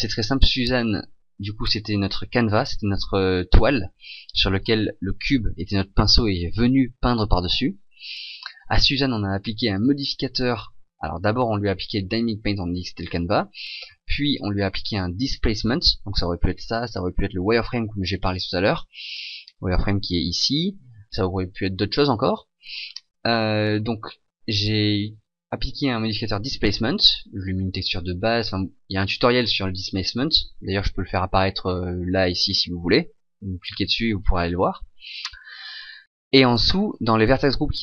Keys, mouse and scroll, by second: 5.1 right click, 8.6 right click, 9.7 click, 12.5 click, 14.1 click, 18.1 click.